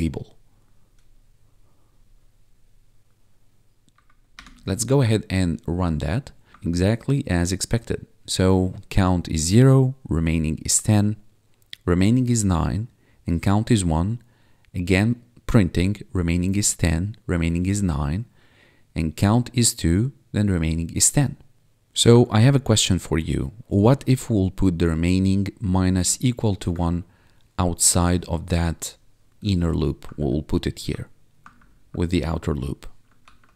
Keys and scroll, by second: 4.3 Return, 6.6 1, 22.2 1, 26.9 1, 30.1 alt+Down, 31.5 alt+Down, 33.2 ctrl+s.